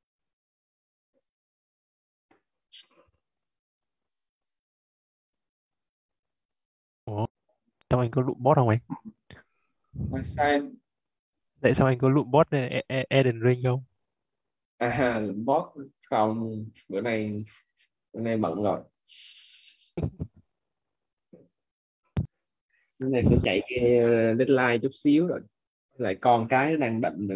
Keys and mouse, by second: 18.6 click.